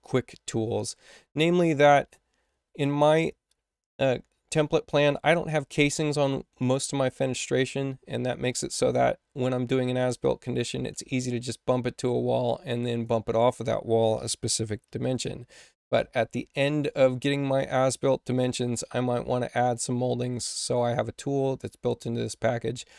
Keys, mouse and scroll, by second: 6.4 space, 8.4 click, 9.3-10.6 drag, 12.0-13.0 drag, 14.4 4, 14.6 8, 20.5 click, 21.8 click.